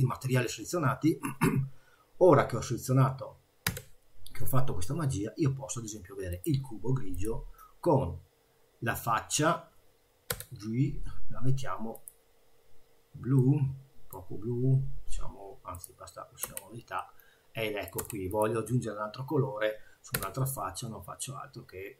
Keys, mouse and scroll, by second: 3.8 g, 7.1 click, 10.3 g, 13.4 middle click, 15.7 click, 16.4 Tab, 17.0 middle click, 18.0 Tab, 18.3 click, 20.1 g.